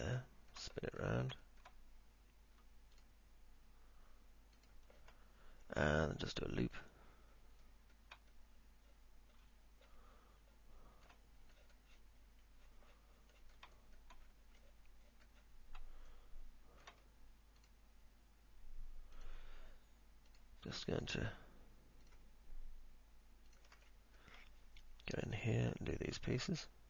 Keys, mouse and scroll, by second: 0.0 ctrl+click, 0.5 alt+middle click, 1.0 middle click, 1.6 alt+middle click, 3.1 ctrl+click, 4.6 ctrl+click, 8.5-11.3 alt+middle drag, 11.6 middle click, 14.0 alt+middle click, 15.0 middle click, 16.3 alt+middle click, 19.3 ctrl+click, 20.5 ctrl+click, 21.1 ctrl+click, 24.1 middle click.